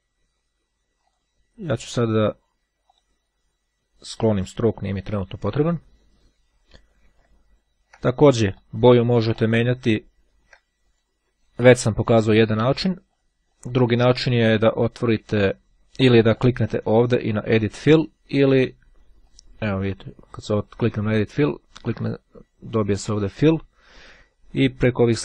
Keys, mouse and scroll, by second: 1.0 click, 2.8 right click, 4.2 click, 7.2-7.8 ctrl+scroll down 2, 7.8 ctrl+scroll down 1, 8.6-9.9 drag, 9.9-10.5 ctrl+scroll down 1, 10.8 ctrl+click, 12.2 click, 13.2 click, 16.3 right click, 19.2 click, 21.9 click, 24.6-25.2 drag.